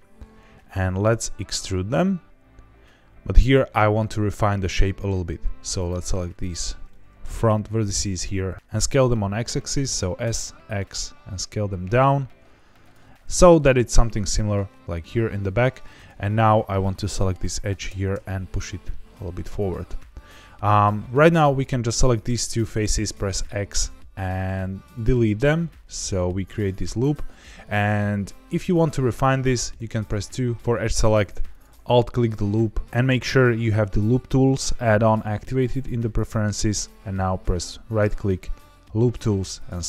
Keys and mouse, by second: 1.0 e, 4.6 click, 5.4 1, 6.3 shift+click, 6.8 middle click, 8.2 g, 8.5 x, 8.6 Escape, 9.8 s, 10.2 x, 12.8 click, 13.2 middle click, 15.4 2, 15.9 click, 16.8 middle click, 17.8 g, 18.1 y, 19.6 click, 20.7 3, 21.2 click, 23.1 x, 27.8 middle click, 29.7 2, 31.4 alt+click, 37.4-39.6 right drag.